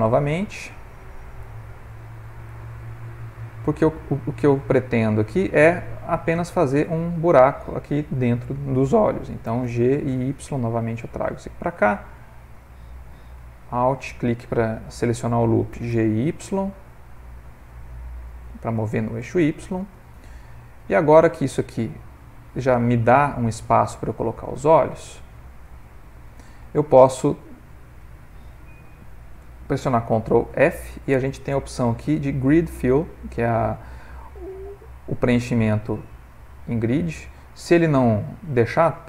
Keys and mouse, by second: 2.6 middle click, 4.0 alt+click, 4.9 middle click, 9.9 g, 13.3 alt+click, 16.2 g, 21.0 middle click, 21.2 middle click, 24.5 ctrl+middle click, 30.1 ctrl+f, 31.9 ctrl+f, 38.6 middle click.